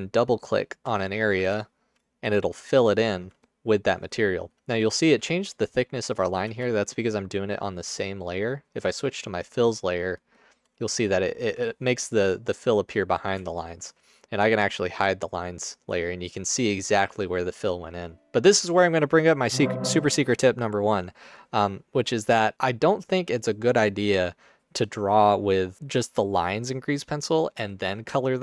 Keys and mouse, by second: 6.6 ctrl+z, 10.9 ctrl+alt+click, 13.5 alt+shift+click, 18.2 ctrl+alt+click.